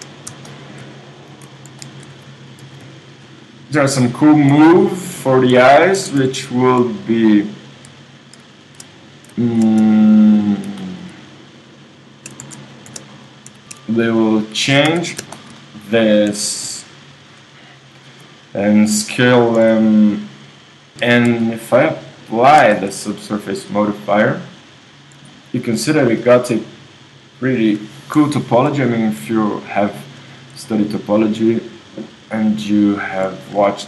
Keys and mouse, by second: 2.6 alt+m, 2.6-5.3 drag, 4.5 shift+r, 6.0 ctrl+Tab, 10.9-12.3 middle drag, 12.4 super+z, 14.9 KP_1, 16.0 super+middle click, 16.6 ctrl+., 19.5 s, 22.6 KP_1, 22.6 g, 22.6 Tab, 24.1 click, 24.4 Tab, 25.0 click, 25.3 click, 31.5-33.8 middle drag.